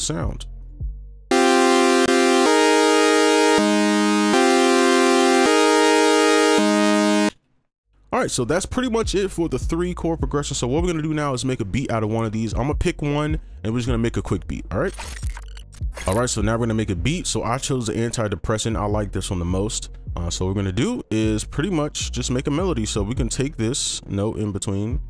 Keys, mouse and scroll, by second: 0.2 double click, 7.2 space, 24.4 ctrl+click, 24.8 shift+click.